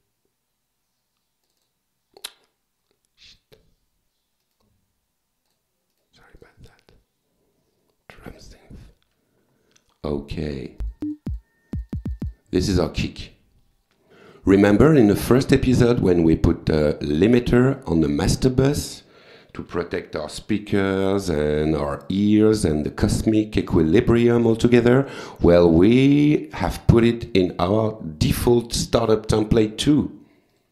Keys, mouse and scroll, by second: 1.5 click, 3.4 click, 4.5 right click, 5.5 click, 5.9 right click, 6.4 click, 8.2 click, 10.8 click, 11.8 click, 13.3 click, 15.2 right click, 16.0 click, 17.7-18.7 typing, 20.8 click, 22.8 click, 24.5 click, 30.4 click.